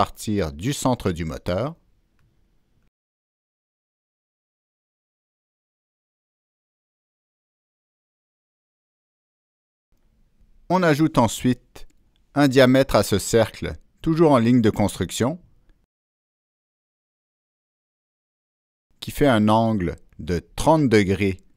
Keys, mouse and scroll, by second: 0.9 click, 2.0 click, 3.4 right click, 3.6 Escape, 3.6 click, 3.7 Escape, 3.7 click, 5.4 click, 5.4 right click, 6.2 click, 6.2 right click, 7.4 click, 7.4 right click, 8.8 click, 11.9 click, 12.7 Escape, 12.7 click, 12.8 Escape, 13.1 Escape, 13.1 click, 15.6 right click, 16.3 Escape, 17.0 right click, 17.5 click, 19.3 click, 19.4 right click, 21.0 click.